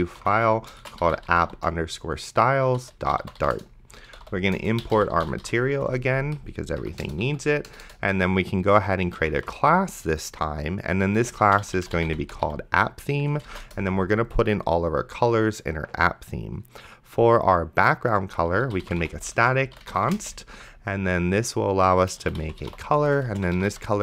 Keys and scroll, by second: 0.0-6.2 typing, 6.8 Up, 7.0 Return, 7.3 End, 7.7 Return, 8.8-10.1 typing, 11.2-13.3 typing, 13.7 Return, 18.4-20.6 typing, 22.1-24.0 typing.